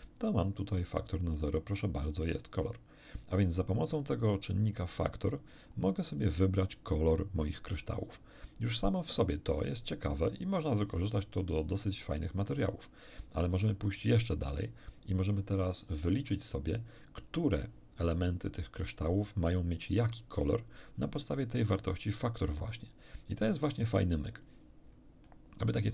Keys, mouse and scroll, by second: 3.8-4.9 drag, 5.1 click, 5.7 click, 10.5-12.7 drag, 14.3-15.1 scroll down 4, 23.3-24.6 drag, 24.9 scroll down 2, 25.3 middle click.